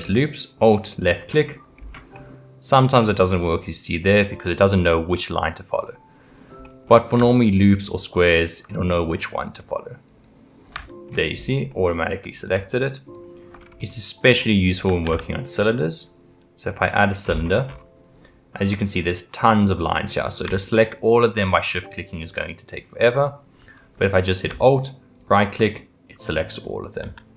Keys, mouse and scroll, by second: 1.1 alt+click, 1.8-2.1 scroll up 3, 2.1 middle click, 3.0-3.4 scroll down 1, 3.4-6.4 middle drag, 6.6-7.8 middle drag, 7.8 alt+click, 8.7-10.1 middle drag, 10.1 alt+click, 11.3-11.7 scroll up 2, 11.7-13.0 middle drag, 13.0 alt+click, 13.5-14.9 scroll down 5, 15.0 shift+a, 19.4 click, 20.9 shift+click, 21.6 shift+click, 22.2 shift+click, 22.7 shift+click, 25.1 alt+click, 25.8-27.0 middle drag, 27.0 g.